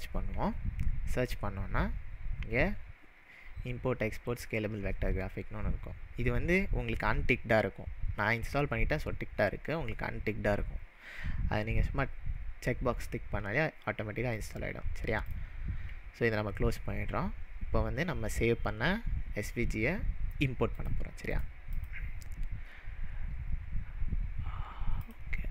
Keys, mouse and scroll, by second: 15.0-15.7 typing, 17.3 click, 20.8 click, 21.7-24.8 drag.